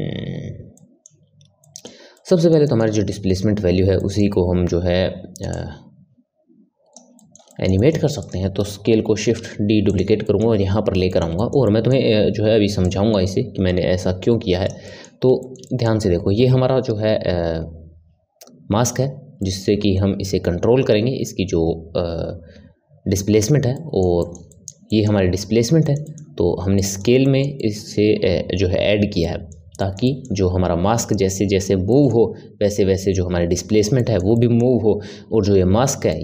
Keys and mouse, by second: 0.7-5.5 middle drag, 5.5 click, 7.1-8.2 middle drag, 8.2 click, 9.1 shift+d, 10.2-12.8 middle drag, 12.8 click, 14.8-22.4 middle drag, 23.7-36.2 middle drag.